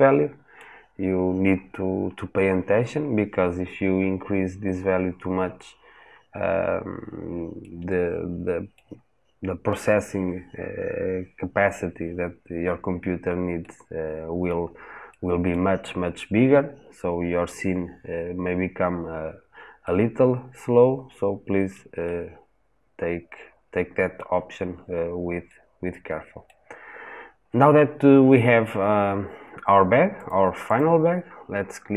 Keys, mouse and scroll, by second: 30.1 click.